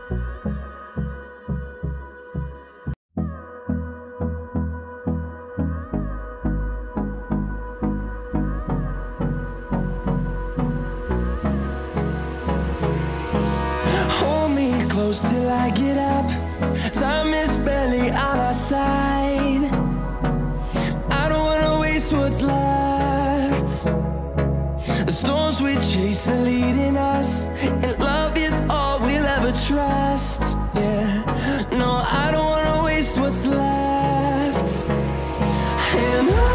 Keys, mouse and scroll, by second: 1.4 click, 4.9 Delete, 6.6 click, 7.0 Delete, 7.4-7.9 scroll down 1, 10.5-10.8 scroll up 1, 10.8 scroll down 1, 12.2-12.7 scroll up 1, 12.7-13.2 scroll down 1, 14.8-25.6 drag, 25.8 click, 28.5 click, 29.7 click.